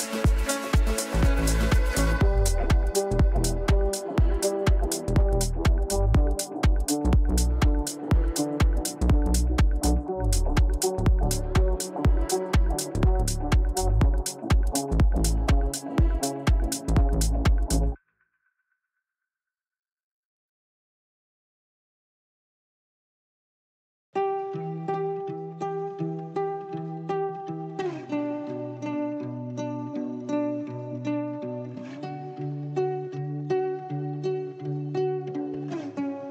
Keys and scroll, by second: 28.1 Delete.